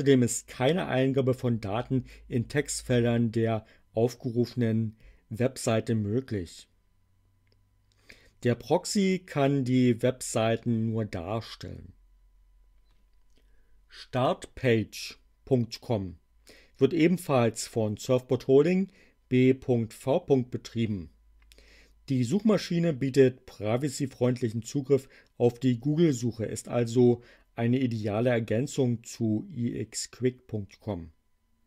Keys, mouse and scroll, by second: 14.1 click.